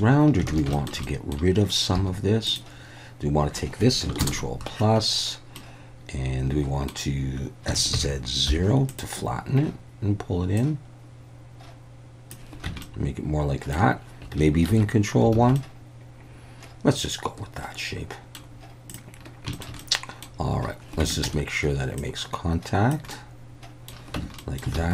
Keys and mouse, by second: 0.6 alt+a, 0.8 shift+click, 1.1 click, 2.0 3, 2.5-3.5 drag, 4.2 ctrl+KP_Add, 5.6-7.3 middle drag, 7.7 s, 7.9 z, 8.5 0, 8.9 click, 10.7-12.3 drag, 12.7 Tab, 12.8-13.8 middle drag, 14.8 ctrl+1, 15.4 alt+a, 15.6-18.4 middle drag, 18.9 click, 19.5 shift+middle click, 19.8-20.2 middle drag, 21.0 Tab, 21.3 a, 22.0 click, 23.2 middle click, 24.2 Tab, 24.4 middle drag, 24.8 alt+a.